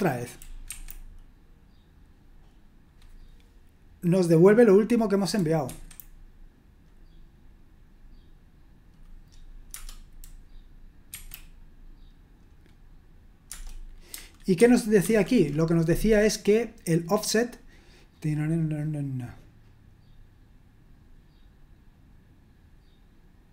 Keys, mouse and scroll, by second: 0.6 F5, 5.6 F5, 11.1 F5, 13.4 Return, 14.5 super+1, 15.0 super+2.